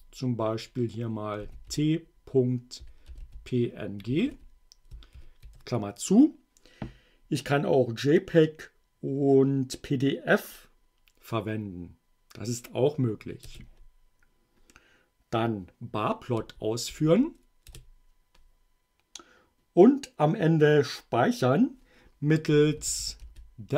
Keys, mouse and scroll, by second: 1.4-3.7 typing, 5.2 shift+9, 13.5 Return, 16.4 Up, 17.7 Return, 22.6-23.7 typing.